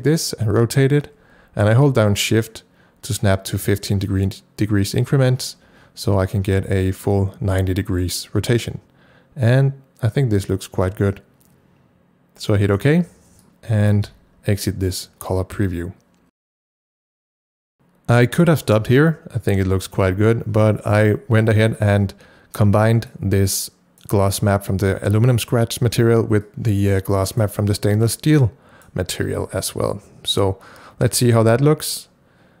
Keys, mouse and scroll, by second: 12.8 ctrl+shift+r, 14.1 c, 14.5 click, 16.6 click, 17.7-20.6 ctrl+drag, 21.2 scroll down 1, 23.1-32.6 drag, 26.9 click, 28.4 click, 29.3 c.